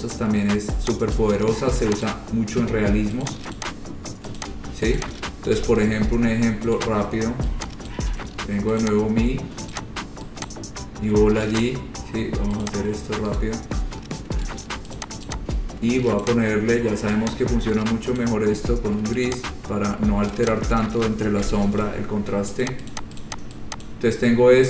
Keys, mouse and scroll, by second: 1.4 click, 2.3 click, 3.5 click, 3.8 click, 4.0-4.4 scroll, 4.6 click, 5.2 shift+click, 5.8 Delete, 7.0 click, 8.1 ctrl+click, 9.1 click, 10.0 click, 10.3 shift+click, 10.7 click, 10.8 ctrl+click, 11.9 click, 12.9 click, 13.6 right click, 14.7 right click, 15.2 click, 15.5 click, 16.4 click, 18.4 click, 19.5 click, 20.7 click, 21.7 Page_Down, 22.9 click, 23.1 click, 23.4 click, 24.1 click.